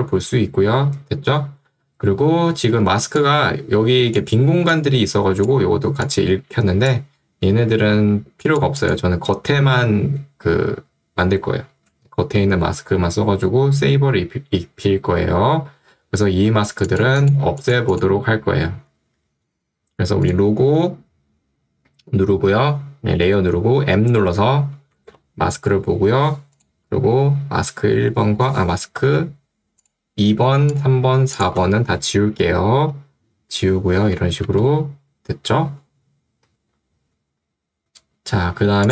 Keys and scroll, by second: 18.9 Escape, 24.1 m, 25.3 m, 29.2 ctrl+z, 34.6 v.